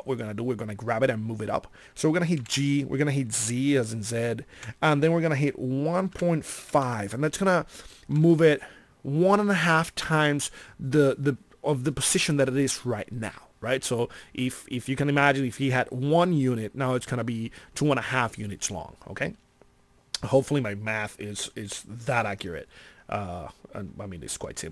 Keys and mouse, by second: 2.3 g, 10.8-16.0 middle drag, 22.9-24.7 middle drag.